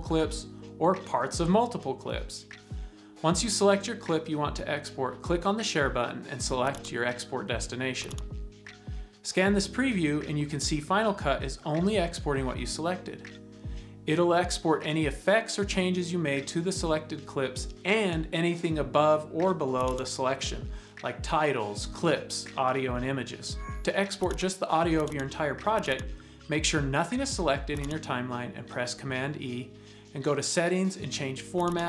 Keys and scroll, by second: 30.0 super+e.